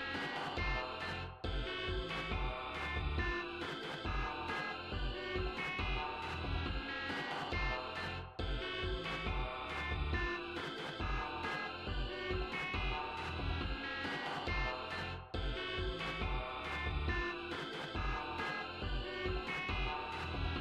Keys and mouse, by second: 0.3-2.7 drag, 18.1-19.3 drag, 20.1 click.